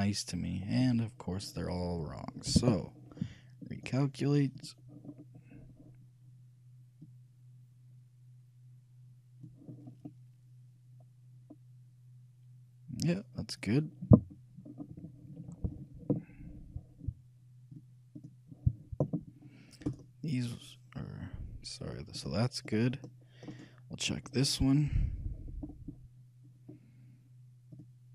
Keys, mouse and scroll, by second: 1.0 a, 2.7 t, 3.9-6.5 drag, 4.4 a, 5.8-7.2 middle drag, 7.2-9.0 drag, 10.0-12.1 middle drag, 13.9 middle click, 14.8-16.8 scroll down 1, 17.9-20.0 drag, 20.0-21.8 right drag, 22.0-24.2 drag, 23.7-25.6 right drag, 25.6-28.1 middle drag, 27.9-28.1 drag.